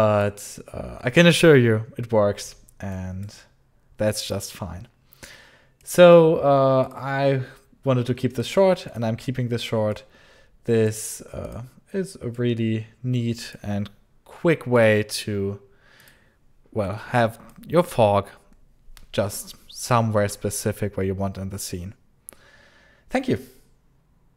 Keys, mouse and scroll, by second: 2.8 click, 4.3 click, 5.7 click, 6.7 click, 8.3 click, 8.8 click, 12.2 click, 14.6 click, 17.4 alt+click, 24.3 click.